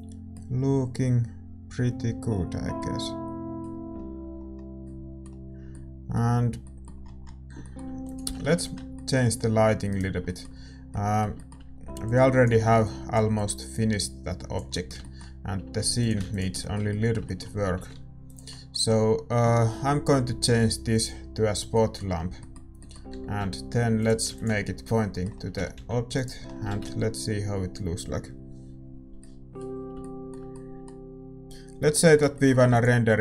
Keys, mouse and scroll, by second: 8.3-11.4 drag, 8.3-17.8 middle drag, 8.3 shift+z, 8.7 ctrl+s, 11.4-17.8 right drag, 17.8 g, 20.9-25.5 drag, 25.5 ctrl+s, 25.5 r, 28.0-29.0 middle drag, 28.0 shift+z, 29.8-33.2 middle drag, 32.7 ctrl+s.